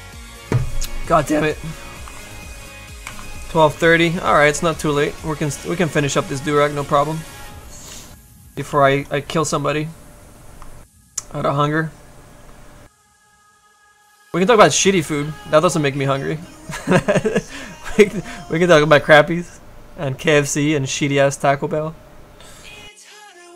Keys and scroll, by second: 6.1 s, 8.8 s.